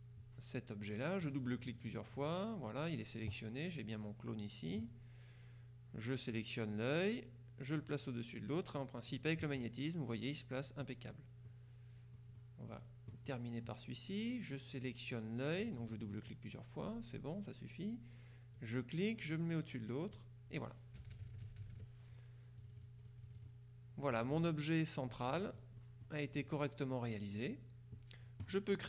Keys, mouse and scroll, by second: 1.3-2.9 drag, 7.0-9.7 drag, 10.9 click, 11.7-12.4 scroll up 1, 12.4 click, 13.4 click, 15.6 click, 18.6-20.7 drag, 21.1 KP_Subtract, 22.7 click, 24.2 click, 25.4-27.0 drag.